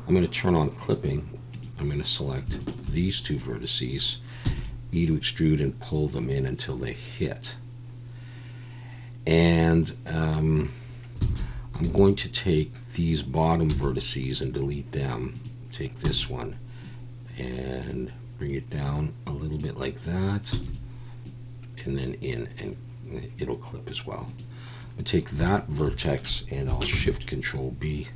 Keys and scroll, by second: 4.4 e, 11.3 alt+a, 11.8 b, 13.7 x, 16.0 e, 20.5 e, 26.9 ctrl+shift+b.